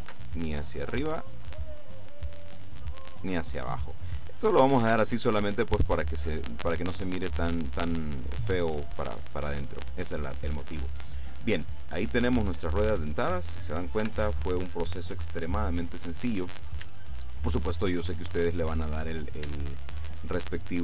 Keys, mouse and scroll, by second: 0.1 ctrl+r, 0.6 ctrl+click, 3.2 click, 4.9 Tab, 5.5 middle click, 6.2-6.7 scroll down 2, 6.7 click, 9.2-9.7 scroll down 2, 9.7 click, 11.7-13.2 drag, 14.1 KP_7, 17.4-18.5 shift+drag, 19.8-20.8 shift+middle drag.